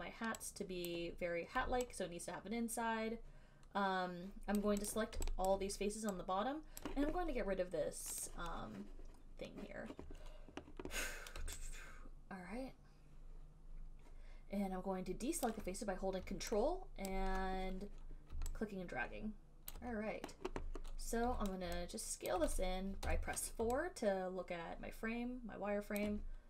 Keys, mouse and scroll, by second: 1.1 click, 4.8 click, 5.2 click, 5.7 alt+click, 7.0 click, 8.4 click, 15.6 alt+click, 17.3 ctrl+click, 19.9 alt+click, 21.5 r, 22.5 alt+click, 23.2 4, 26.2 alt+click.